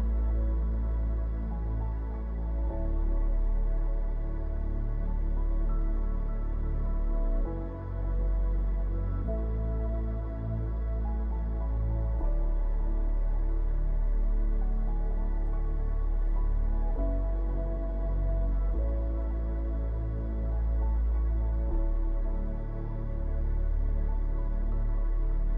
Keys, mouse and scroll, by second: 3.4 ctrl+middle click, 5.9 click, 7.5-8.3 scroll down 3, 8.0 middle click, 9.2 click, 10.6-11.3 scroll up 2, 11.3 shift+click, 13.2 ctrl+l, 20.7 middle click, 21.4 click, 21.8-22.1 scroll down 2, 22.1-22.8 scroll up 2, 22.8 middle click.